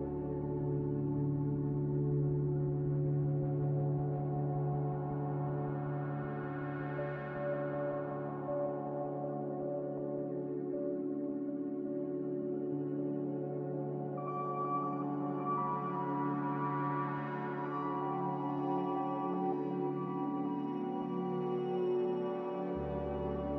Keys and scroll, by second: 3.7 x, 15.9 x, 16.9 typing.